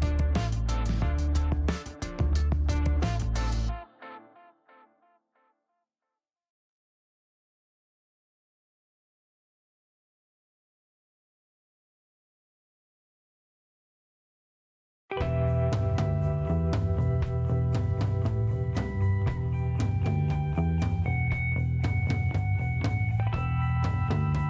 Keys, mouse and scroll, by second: 0.2 middle click, 0.6 click, 1.1 middle click, 1.6 scroll up 1, 1.9 middle click, 3.9 click, 4.8 click, 6.7 click, 7.9 click, 9.3 click, 9.7 middle click, 10.0 scroll up 1, 11.3 click, 12.2 click, 13.2 click, 13.7 right click, 14.0 scroll up 1, 14.4 middle click, 15.2-15.6 scroll up 2, 15.2 middle click, 16.5 click, 17.4 click, 17.8 click, 21.9 click, 22.5 middle click, 22.7 scroll down 1, 23.6-24.4 drag.